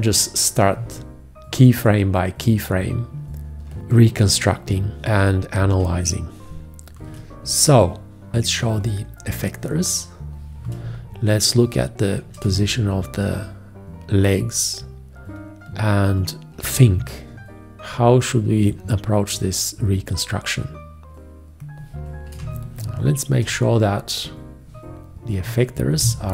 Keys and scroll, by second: 3.8 ctrl+space, 3.9 ctrl+space, 4.6 space, 8.4 F1, 11.0 ctrl+space, 12.7 space, 22.6 ctrl+space.